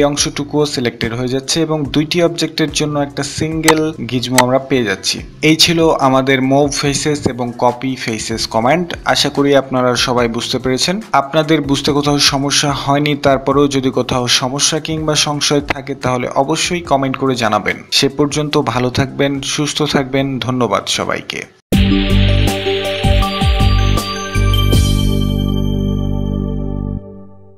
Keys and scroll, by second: 5.2 Escape.